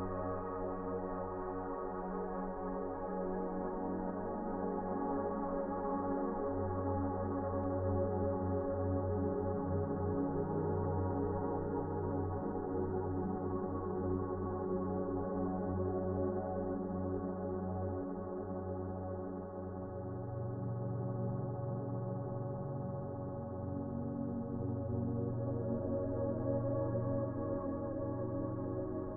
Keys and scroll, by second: 6.4 Delete.